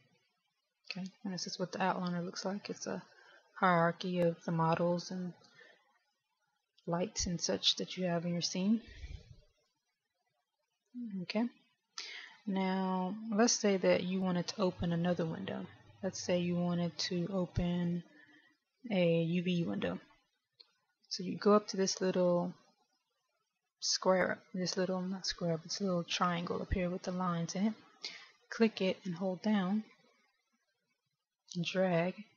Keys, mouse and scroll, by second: 6.8 click, 11.0 click, 12.2 click, 28.9 click.